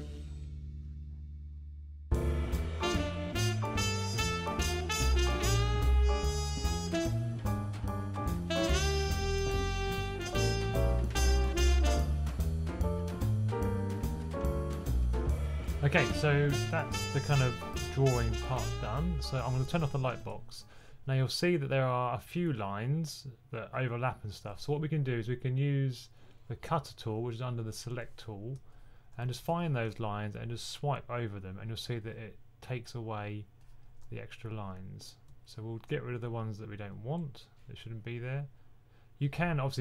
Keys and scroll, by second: 1.4 super+z, 3.4-5.1 typing, 5.4 super+c, 5.4 super+v, 7.4-8.4 typing, 12.3 super+z, 12.8 super+z, 14.2-15.4 typing, 16.6 typing, 20.8 typing, 29.1 2, 29.3 2, 29.7 2, 33.9 typing.